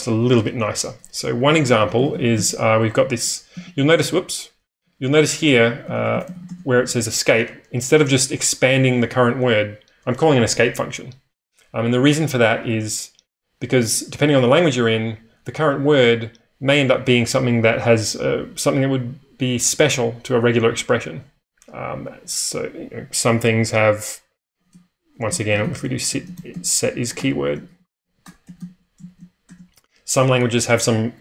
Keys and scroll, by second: 1.1-4.2 typing, 4.8 Escape, 5.5-6.8 typing, 25.1-29.0 typing.